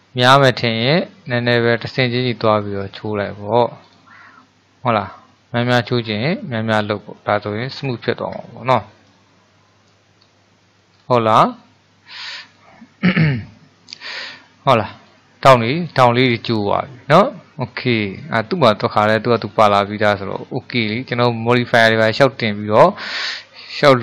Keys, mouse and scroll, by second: 1.7-5.8 drag, 5.8-6.4 scroll down 5, 7.0 middle click, 7.9-8.6 scroll up 4, 8.6-10.2 shift+middle drag, 10.2-11.0 scroll up 1, 11.0 scroll down 1, 11.4-11.7 scroll up 3, 12.4-13.2 scroll up 1, 13.2-18.7 middle drag, 19.6-24.0 shift+middle drag.